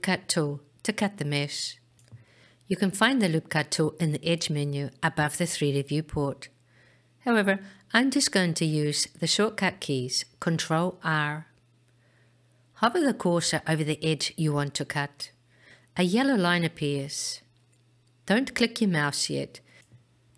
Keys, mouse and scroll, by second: 3.8-11.0 drag, 16.2 ctrl+r.